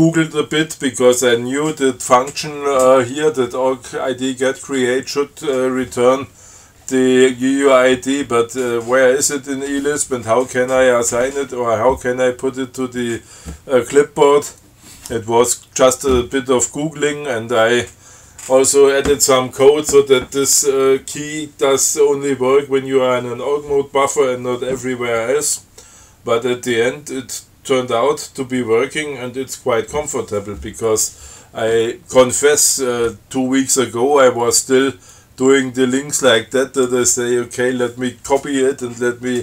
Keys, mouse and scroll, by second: 35.4-37.3 drag.